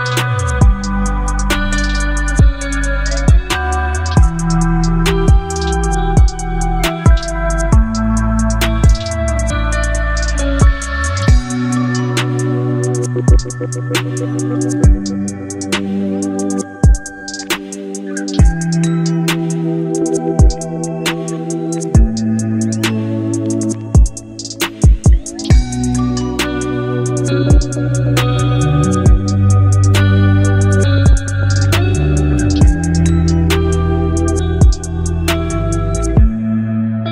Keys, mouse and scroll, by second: 17.6 right click, 18.8 click, 25.2 ctrl+Num_Lock, 25.2 click, 25.4 ctrl+t, 29.2 ctrl+t, 29.2-35.4 alt+drag.